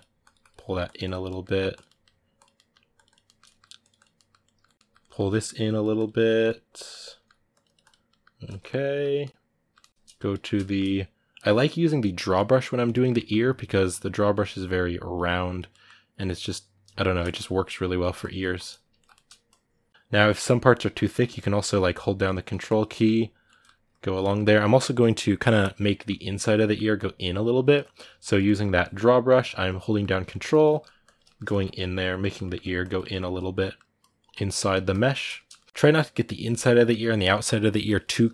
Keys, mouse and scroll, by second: 1.1 middle click, 1.5 click, 1.6 middle click, 2.2 click, 2.3 middle click, 2.8 click, 3.0 ctrl+middle click, 3.7 click, 3.9-5.4 ctrl+middle drag, 5.4 click, 6.1-7.3 ctrl+middle drag, 7.3 click, 7.9-9.9 middle drag, 9.9 click, 10.2-12.5 shift+middle drag, 12.5 click, 12.7 ctrl+middle click, 13.2-15.5 drag, 15.5 middle click, 15.9-17.0 drag, 17.0 middle click, 17.3-18.7 shift+drag, 18.7 ctrl+middle click, 19.2 shift+click, 19.8 middle click, 20.2 click, 21.0 middle click, 21.5-22.7 ctrl+drag, 22.7-23.7 middle drag, 23.7 ctrl+click, 24.0-26.2 middle drag, 26.2 ctrl+click, 26.4 ctrl+middle click, 26.7 ctrl+click, 27.6 middle click, 28.0 ctrl+click, 28.2-29.4 middle drag, 29.4 ctrl+click, 29.6 ctrl+middle click, 30.3 ctrl+click, 30.5 middle click, 30.8 ctrl+click, 31.0-32.6 shift+middle drag, 32.6 ctrl+click, 32.8 ctrl+middle click, 33.8 ctrl+click, 34.3 middle click, 34.7 ctrl+click, 35.1-38.3 shift+middle drag.